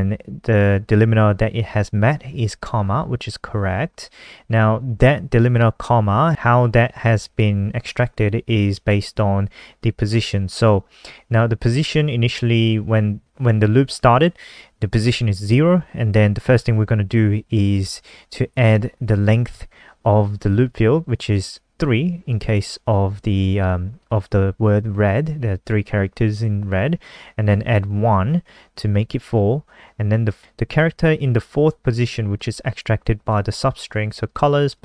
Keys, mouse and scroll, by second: 30.5 click, 34.1 click, 34.5 click, 34.6 click.